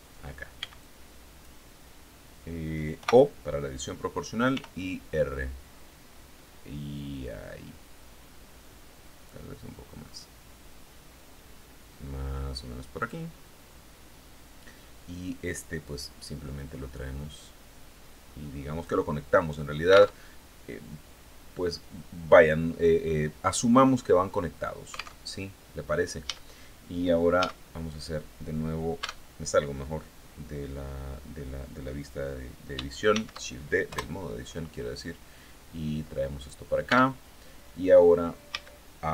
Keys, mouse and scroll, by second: 0.1 b, 0.2 click, 2.4 o, 4.0 r, 5.2 scroll up 2, 5.8 scroll up 2, 7.2 scroll up 2, 7.7 scroll up 2, 8.2-8.8 scroll down 4, 12.4 click, 15.3-18.5 drag, 19.6 alt+Tab, 24.6 alt+Tab, 25.7 a, 26.8 a, 28.4 Tab, 32.5 shift+d, 33.3 Return, 34.4-36.1 drag, 36.3 Tab, 38.0 a, 38.9 b.